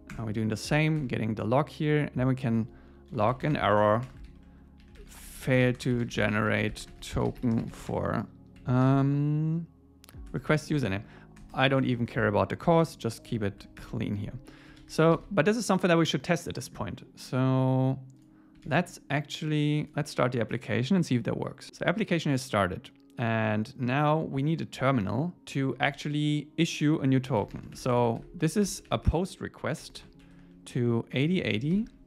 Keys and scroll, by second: 0.1 Return, 1.0 Tab, 4.1 Return, 10.3 Tab, 14.8 super+s.